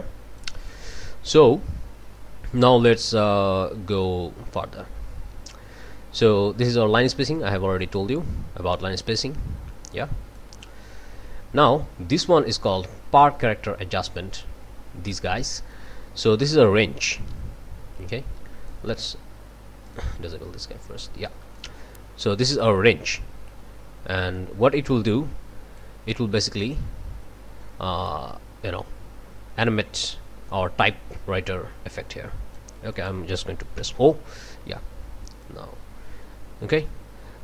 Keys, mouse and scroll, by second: 7.8-10.6 drag, 11.3 scroll down 2, 16.6-18.9 drag, 19.8 click, 21.5-26.0 drag, 26.6-32.8 drag, 32.9 click, 33.8 o, 35.4-37.4 drag.